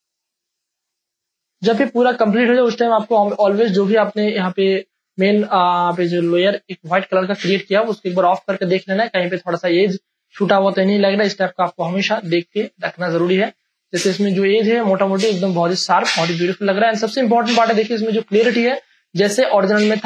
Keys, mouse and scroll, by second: 0.6 space, 0.8 ctrl+click, 2.0 ctrl+click, 3.9 Return, 6.2 click, 7.5 space, 7.6 ctrl+click, 9.8 ctrl+space, 10.0 click, 10.3 space, 10.7 ctrl+click, 11.3 click, 12.5-14.1 ctrl+drag, 14.1 click, 15.0-17.2 ctrl+drag, 17.2-20.0 ctrl+drag.